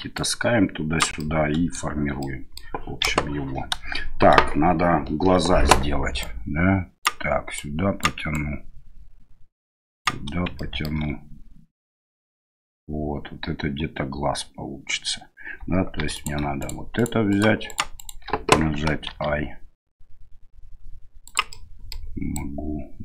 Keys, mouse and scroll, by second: 0.1 right click, 1.1 middle click, 2.2 middle click, 3.0 KP_1, 6.2 right click, 7.5 right click, 8.3-10.0 right drag, 10.5 shift+middle click, 10.7 shift+right click, 16.0 3, 16.6 right click, 16.9 right click, 17.3 right click, 17.6 right click, 17.9 right click, 19.1 i, 21.5 middle click, 22.4 click.